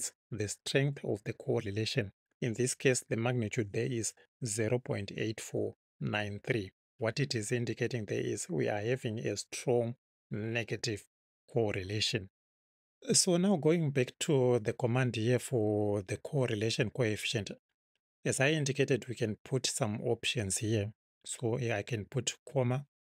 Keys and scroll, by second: 19.2 Left, 22.5 ,.